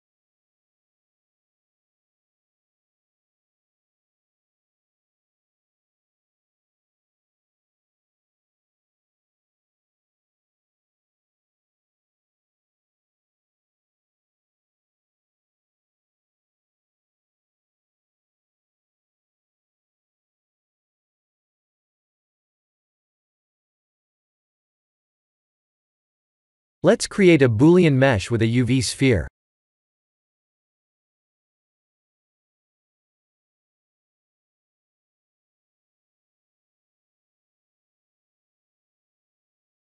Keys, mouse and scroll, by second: 2.8 click, 3.1 b, 4.0 g, 7.0 click, 7.4 b, 8.1 g, 10.0 click, 10.5 shift+middle click, 11.7 Tab, 12.4 middle click, 13.7 s, 16.0 Tab, 16.3 middle click, 17.2 shift+z, 17.4 middle click, 19.9 Tab, 20.4 s, 22.6 Tab, 22.9 middle click, 23.6 shift+z, 24.2 middle click, 24.5 middle click, 25.0 KP_1, 27.2 shift+a, 29.4 Tab, 33.4 r, 35.5 s, 38.3 g.